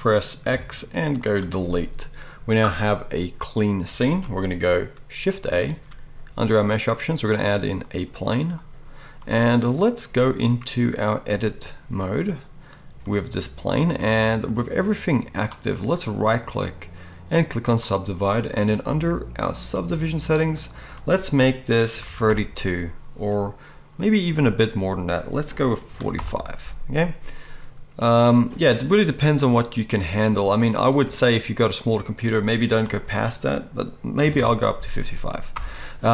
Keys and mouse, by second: 0.5 x, 5.6-16.2 shift+middle drag, 5.6 shift+a, 11.3 Tab, 16.2-19.5 right drag, 19.6-23.7 drag, 19.6-23.7 middle drag, 19.6-23.7 right drag, 34.3 5.